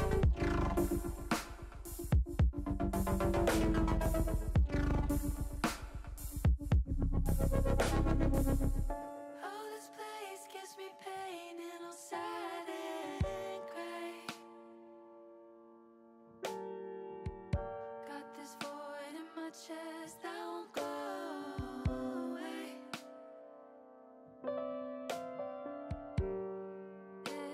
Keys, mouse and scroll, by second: 2.2 Tab, 3.2 Tab, 4.7 l, 5.9 l, 9.0 KP_3, 11.2-13.2 drag, 14.2 KP_1, 15.6 click, 17.4 ctrl+z, 19.4 click, 20.6 ctrl+z, 21.5 click, 22.9 l, 24.6 l, 25.7-27.5 drag.